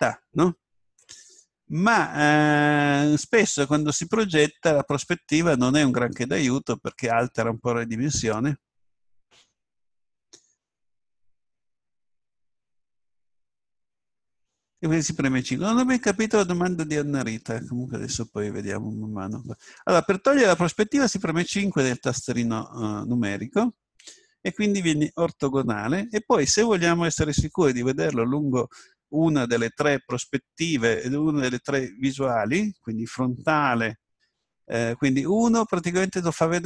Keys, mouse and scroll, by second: 4.6-5.6 scroll up 1, 5.6-8.1 middle drag, 17.8-19.0 scroll up 1, 19.0-20.5 middle drag, 21.4 KP_5, 34.8 KP_1.